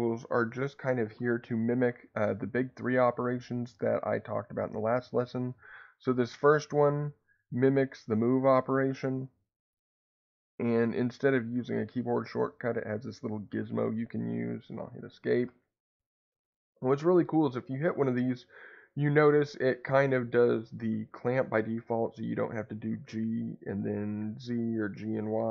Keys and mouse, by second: 8.1 click, 12.6-15.4 drag, 15.4 Escape, 17.6-21.4 drag, 21.1 Escape, 22.6-25.1 drag, 24.8 Escape.